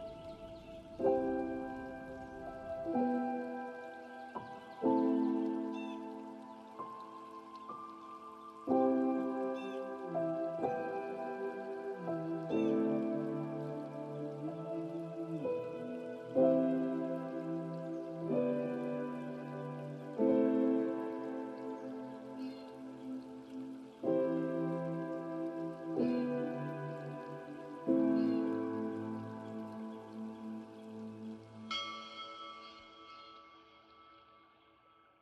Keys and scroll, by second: 33.5 ctrl+t.